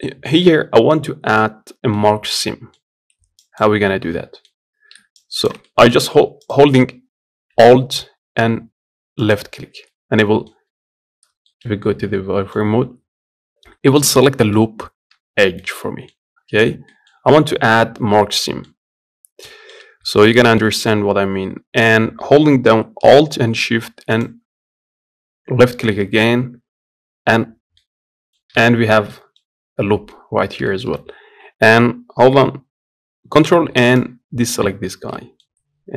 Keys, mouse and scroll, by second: 3.3 ctrl+click, 3.8-5.1 middle drag, 5.1 ctrl+click, 5.4 middle click, 6.2 click, 9.6 middle click, 10.2-10.6 scroll down 1, 10.6 z, 11.2-12.5 shift+middle drag, 12.5-13.9 scroll up 1, 13.9 middle click, 14.4-15.0 scroll up 1, 15.0 z, 15.3-19.6 middle drag, 19.6 scroll up 1, 19.8-23.9 shift+middle drag, 23.9 alt+shift+click, 27.6 middle click, 28.4 z, 28.6 scroll down 1, 28.8-29.8 middle drag, 29.8-30.4 scroll up 1, 30.4 shift+middle click, 30.8 z, 34.2 ctrl+click, 34.9-35.9 middle drag.